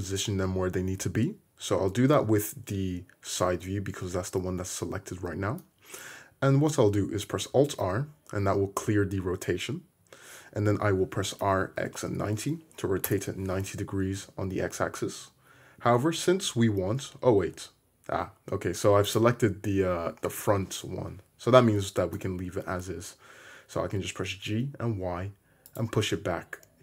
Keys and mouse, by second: 7.9 alt+r, 11.5 r, 15.3-26.8 middle drag, 16.2 g, 22.1 g.